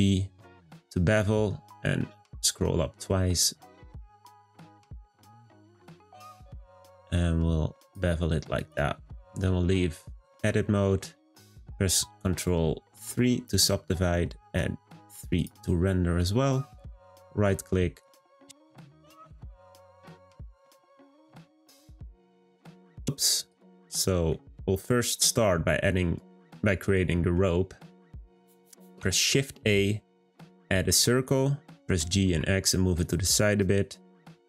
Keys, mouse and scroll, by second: 8.6 click, 9.7-10.8 scroll down 1, 10.9-12.9 scroll down 1, 12.9 ctrl+3, 15.4-17.1 drag, 17.1-18.8 right drag, 18.8 click, 19.6-21.0 scroll down 1, 21.4 middle click, 22.0-22.7 scroll down 2, 22.7-23.4 middle drag, 23.4 click, 24.3-27.8 middle drag, 27.8-28.2 scroll up 1, 28.2-28.8 middle drag, 28.8 shift+a.